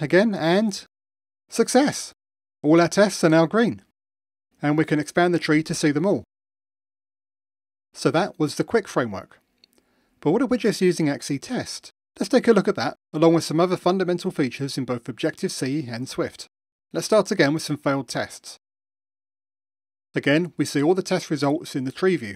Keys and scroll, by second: 2.1 super+4, 16.7 super+/, 17.9 super+/, 18.0 super+e, 19.5 ctrl+shift+r.